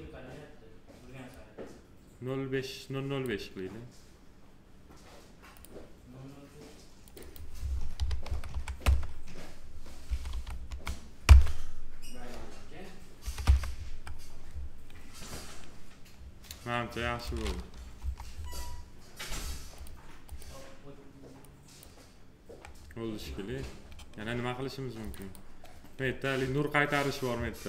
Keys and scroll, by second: 7.9 1, 8.7 Return, 10.0 1, 11.2 Return, 13.1 1, 13.3 Return, 17.9 Delete.